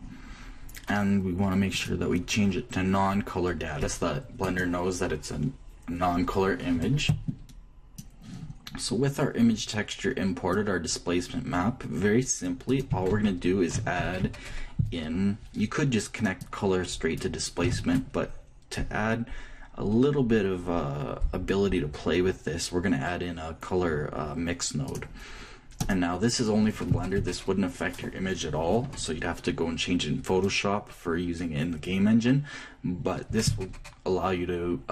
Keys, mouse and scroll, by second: 2.1-4.0 drag, 11.1-13.1 drag, 13.3-15.2 ctrl+drag, 13.7 ctrl+a, 14.6 shift+a, 18.3 shift+a.